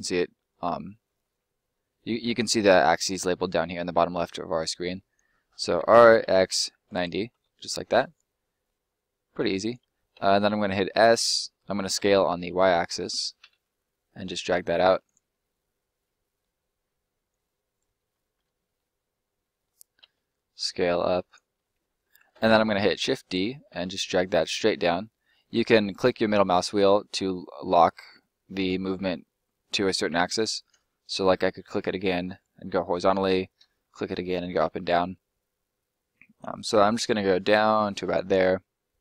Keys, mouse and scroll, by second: 0.7 middle click, 4.7 middle click, 5.7 r, 6.2 x, 7.2 Return, 7.9 middle click, 9.4 click, 10.1 s, 11.9 y, 15.0 click, 15.2 middle click, 17.2 click, 17.9 middle click, 20.0 s, 21.2 click, 21.5 middle click, 23.0 shift+d, 23.8 middle click, 30.8 middle click, 33.5 middle click, 38.0 click, 38.2 middle click.